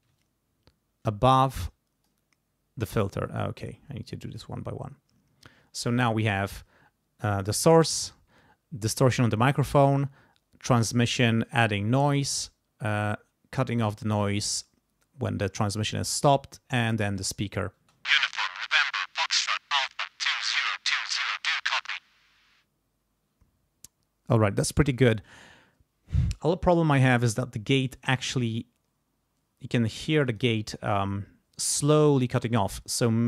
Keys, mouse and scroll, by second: 0.2-2.2 shift+drag, 3.2-4.6 drag, 7.5 click, 8.9 click, 10.7 click, 12.9 click, 16.7 click, 17.8 space, 23.3 space, 30.2 click.